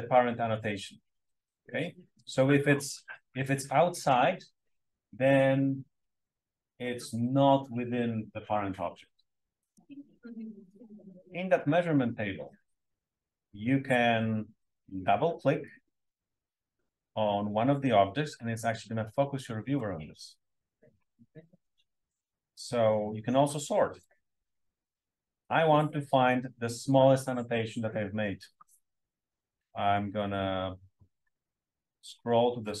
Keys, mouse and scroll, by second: 1.2-1.6 scroll down 1, 9.7 Page_Down, 10.7 click, 15.7 click, 23.9 click, 28.4-29.9 scroll down 2, 29.9-30.5 scroll down 1, 30.5-31.6 scroll up 2, 31.6-32.8 scroll down 2.